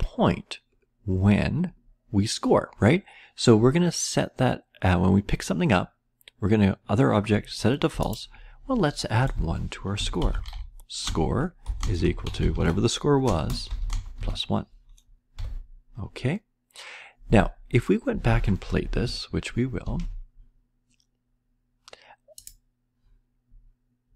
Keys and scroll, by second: 9.2 Return, 9.6-15.8 typing, 19.8 ctrl+s.